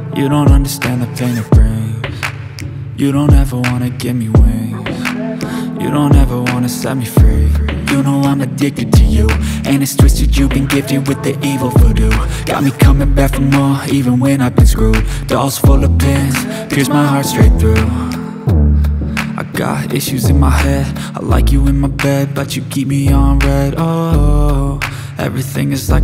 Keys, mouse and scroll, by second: 1.3-3.9 drag, 3.9-4.8 scroll up 1, 4.8-8.0 drag, 14.1-19.2 drag, 19.2 BackSpace, 25.1 click.